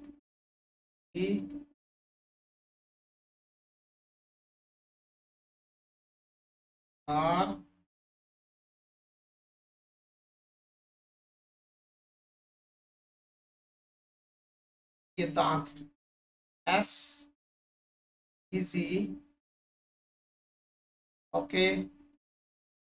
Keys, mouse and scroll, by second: 0.0 click, 8.8 click, 9.2 1, 11.0 click, 13.3 click, 14.1 scroll up 1, 15.3 alt+shift+click, 17.5 click, 19.8 click, 20.3-20.9 scroll up 1, 21.2 alt+shift+drag, 21.5-22.1 scroll down 2.